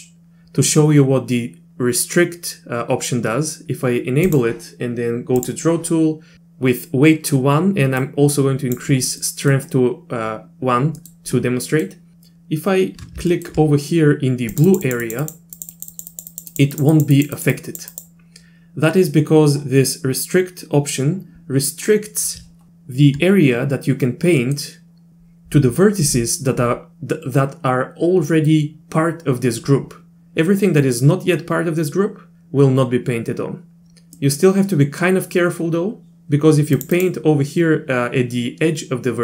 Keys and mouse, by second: 4.3 click, 5.4 click, 8.0 click, 9.2 middle click, 11.0 middle click, 11.6 middle click, 12.1 ctrl+z, 13.3 shift+middle click, 14.5 click, 14.7 click, 14.8 click, 15.0 click, 15.2 click, 15.6 click, 15.7 click, 15.9 click, 16.1 click, 16.3 click, 16.5 click, 16.7 click, 16.9 click, 17.1 click, 17.3 click, 17.5 click, 17.9 click, 24.4 middle click, 34.2 middle click, 36.8 click, 36.9 click.